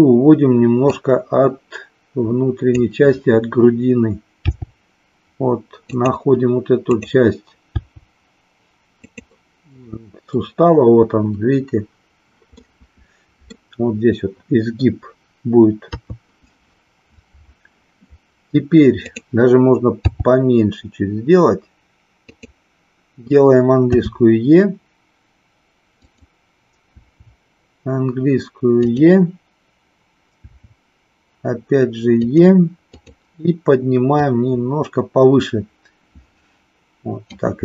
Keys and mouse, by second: 0.9-2.6 drag, 4.5 g, 6.0 click, 6.8 click, 7.6 g, 12.5-13.6 middle drag, 15.9 KP_3, 19.0 click, 20.0 g, 22.3 click, 23.9 e, 26.9 e, 28.8 click, 30.4 e, 32.9 click, 34.1-37.3 drag.